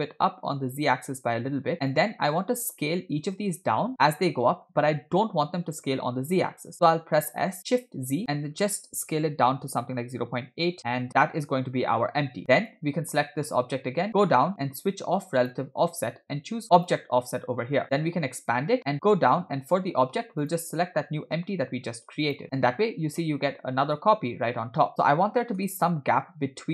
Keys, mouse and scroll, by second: 7.3 s, 11.3-12.4 middle drag, 12.6-13.6 drag, 14.1-15.0 scroll down 6, 15.4 click, 17.0 click, 18.7 click, 18.8-19.1 scroll down 3, 20.5 click, 22.4 middle click, 23.4 scroll up 1, 25.7 KP_1, 26.4-26.7 scroll up 2.